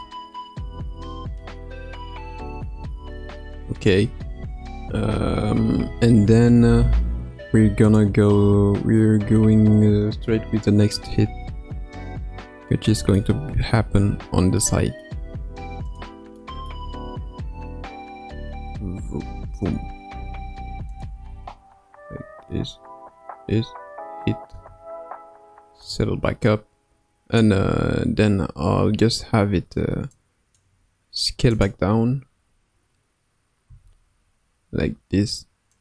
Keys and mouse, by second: 2.6 space, 5.1 ctrl+s, 7.9 click, 10.9 space, 12.2 space, 12.6-13.2 middle drag, 14.1 space, 14.6-15.0 middle drag, 15.9 space, 16.4-16.7 middle drag, 16.8 space, 20.1 space, 21.0-21.3 drag, 21.3 space, 24.5 space, 25.8-27.4 drag, 30.1 click, 31.6 click, 33.6 s.